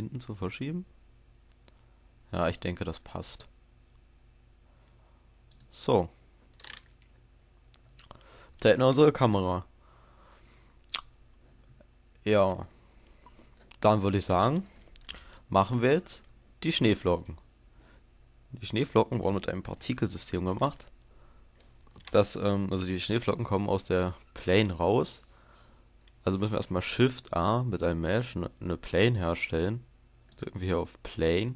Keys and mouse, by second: 5.6-7.4 drag, 7.4-26.7 middle drag, 26.7 shift+a.